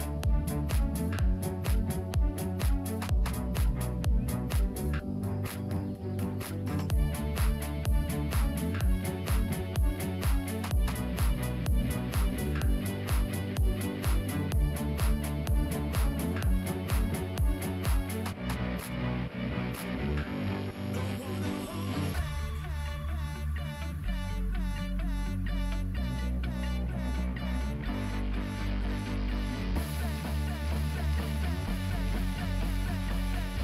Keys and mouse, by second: 0.1 e, 6.0 space, 6.2 z, 8.1 alt+z, 8.6 space, 10.3 g, 12.9 alt+click, 13.7 ctrl+click, 14.7 g, 18.2 ctrl+click, 19.0 KP_Decimal, 20.6 shift+middle click, 21.6 g, 23.7 ctrl+click, 24.5 g, 27.0-28.1 ctrl+drag, 28.6 KP_Decimal, 29.9 ctrl+click, 31.1 g.